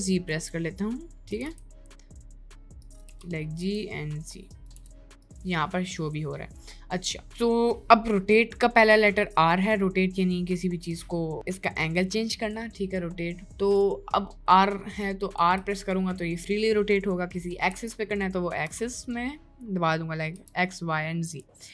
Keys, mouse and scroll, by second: 0.0 g, 1.3 g, 3.0 g, 4.7 z, 7.1-7.9 middle drag, 8.4 middle click, 13.2 middle click, 13.6 middle click, 15.4 r.